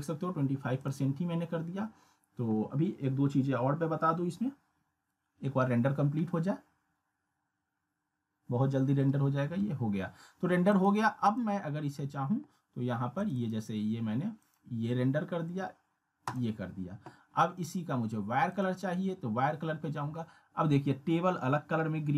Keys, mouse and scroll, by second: 0.8 click, 1.1 scroll up 1, 10.7 click.